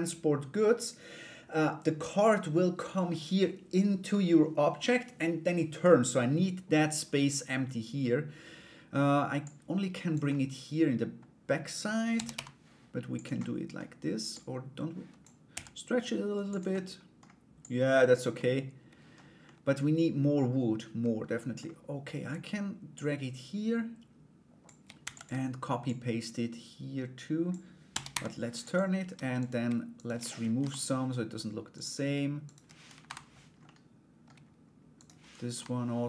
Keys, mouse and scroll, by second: 9.0 click, 9.9 middle click, 13.0 middle click, 13.9-16.3 drag, 16.3 middle click, 17.2 click, 17.9 middle click, 19.0-21.1 middle drag, 22.5-24.4 drag, 24.6 shift+d, 25.5-27.1 drag, 27.5 r, 29.0 right click, 29.5 shift+right click, 30.2 Delete, 31.3 right click, 32.0 shift+right click, 33.2 middle click, 34.5 right click, 35.7 middle click.